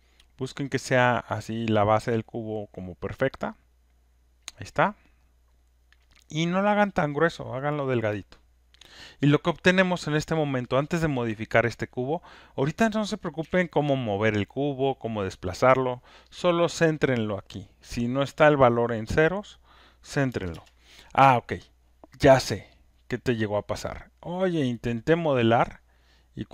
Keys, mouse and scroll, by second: 4.4 click, 7.9 click, 13.4 q, 16.9 click, 20.3 0, 20.5 Return, 22.8 click.